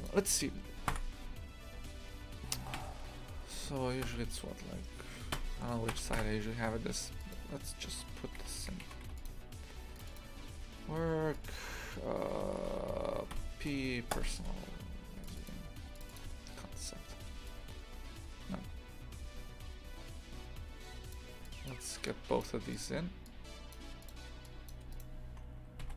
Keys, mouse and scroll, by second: 0.9 KP_1, 7.2-10.2 drag, 22.7-24.9 drag, 24.9 right click, 25.8 g.